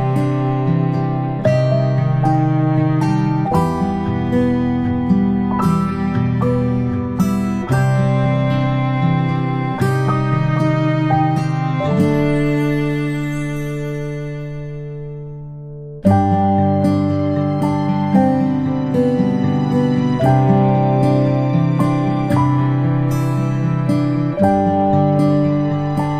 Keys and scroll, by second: 0.9 ctrl+space, 3.4 ctrl+z, 11.4 ctrl+space, 11.7 ctrl+space, 13.1 ctrl+space, 14.7 space, 17.9 space, 18.6 space, 23.4 space, 23.7 space, 24.5 i.